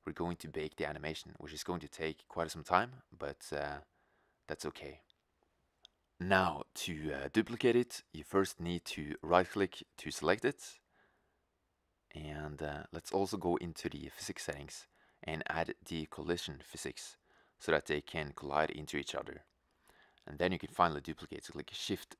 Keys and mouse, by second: 0.4 shift+z, 1.7-3.3 drag, 3.8-6.2 drag, 6.2 shift+z, 7.5 shift+z, 11.0 middle drag, 12.1-12.9 middle drag, 18.2-20.9 drag, 20.9-21.4 middle drag.